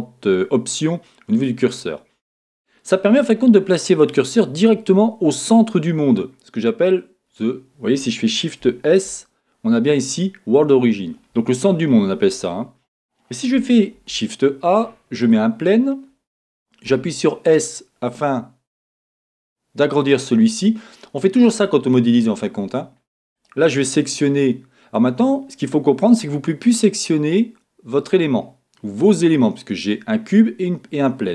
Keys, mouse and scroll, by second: 3.1-20.0 middle drag, 15.8-16.8 scroll down 2, 16.8 scroll down 1, 16.9 s, 20.0 click, 21.1 scroll up 1, 22.5-23.3 scroll down 2, 23.3 click, 24.9 click, 25.4-26.0 scroll down 2, 26.0-30.0 scroll up 3.